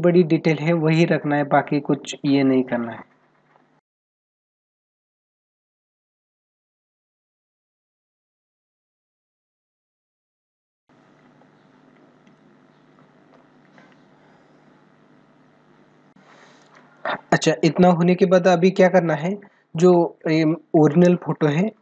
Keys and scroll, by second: 3.7 space, 4.1 ctrl+=, 4.3 space, 5.0 space, 7.5 ctrl+alt+z, 8.5 space, 10.7 ctrl+=, 18.8 ctrl+-, 21.0 ctrl+-.